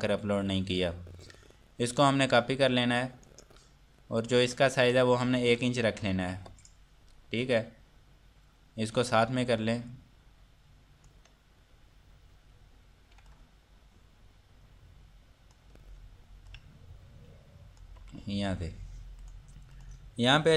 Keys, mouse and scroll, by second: 2.4 click, 4.6 click, 6.4 KP_Enter, 8.6 scroll up 1, 9.5 click, 11.6 scroll down 1, 12.3 scroll up 1, 16.0 scroll down 1, 16.6 click, 18.5 scroll down 1, 19.2 click.